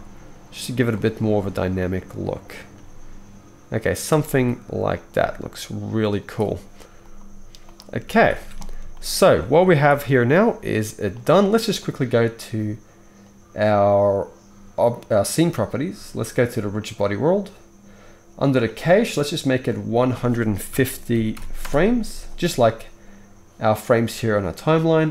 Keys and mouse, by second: 0.9-7.1 right drag, 1.0 r, 2.7 g, 4.2 g, 5.1 g, 7.1-9.0 middle drag, 8.2 ctrl+s, 8.4 ctrl+s, 9.8 ctrl+b, 15.4-25.1 right drag, 16.8-25.1 drag, 16.8-25.1 middle drag.